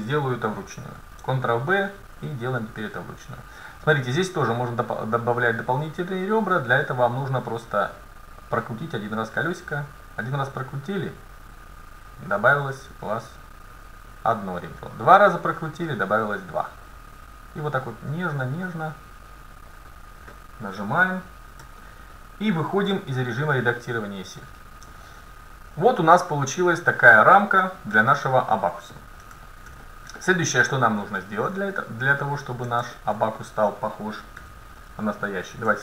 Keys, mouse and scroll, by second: 1.0 ctrl+b, 20.8 scroll up 1, 20.9-22.5 middle drag, 21.7 Tab, 23.0 Tab, 24.5 middle click, 28.0 KP_7, 34.4 a, 35.0 middle click.